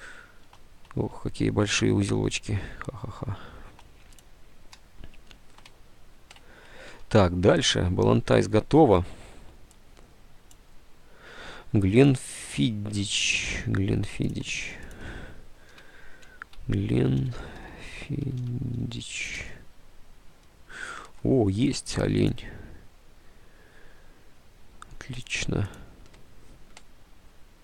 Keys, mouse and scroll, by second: 0.5 space, 1.1 space, 4.3 space, 5.9 alt+Tab, 7.0 alt+Tab, 7.1 space, 13.7 alt+Tab, 15.6-19.8 typing, 21.9-22.7 typing.